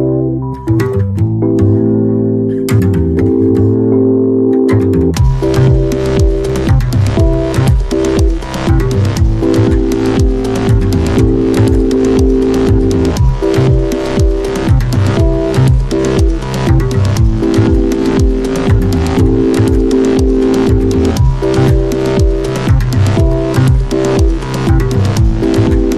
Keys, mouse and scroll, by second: 4.2-10.6 drag, 4.9 typing, 10.6-20.3 drag, 10.8 typing, 21.2-25.9 drag.